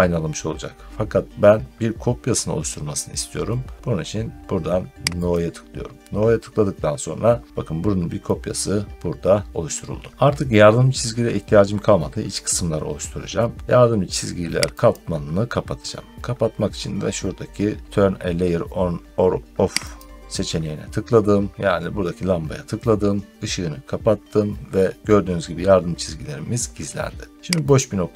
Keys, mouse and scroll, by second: 14.8 click, 19.8 click, 27.7 click.